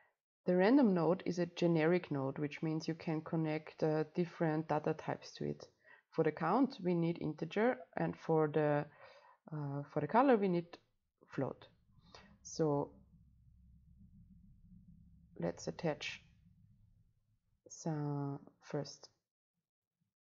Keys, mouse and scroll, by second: 2.0-3.1 scroll up 2, 3.1-6.4 drag, 7.7-12.5 drag, 13.1-15.2 drag, 15.2-17.7 right drag, 17.7-20.0 drag.